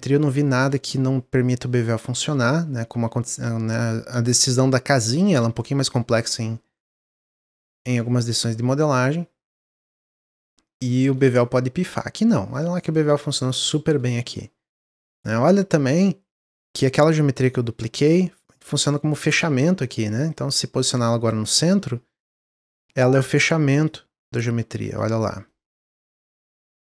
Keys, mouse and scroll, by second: 0.3-0.9 scroll up 1, 1.5-8.3 shift+drag, 8.3-11.3 middle drag, 11.8-14.0 middle drag, 14.0-15.0 scroll down 1, 15.0-17.3 scroll down 13, 17.3 click, 18.0 middle click, 18.3 click, 18.6-20.3 middle drag, 20.3-21.4 drag, 22.7 drag, 23.1-23.8 middle drag, 23.8 drag, 24.8-26.5 middle drag, 26.5 click.